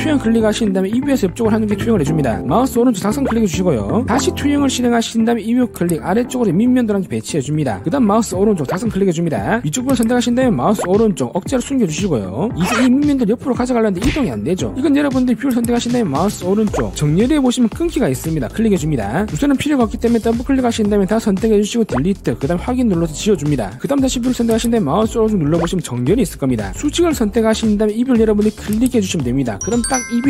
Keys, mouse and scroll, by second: 0.9 click, 1.8 click, 3.2 right click, 5.3 click, 6.2 click, 6.7 scroll up 1, 7.9 click, 8.8 right click, 10.7 click, 10.9 right click, 12.3 click, 13.7-14.8 drag, 16.0 click, 16.8 right click, 17.3 click, 20.6 click, 20.8 click, 21.0 click, 21.9 click, 22.3 ctrl+a, 23.3 click, 24.9 click, 25.7 right click, 27.7 click, 28.2 scroll up 1, 28.8 click, 29.3 scroll up 1, 29.6 scroll down 1, 29.8 middle click.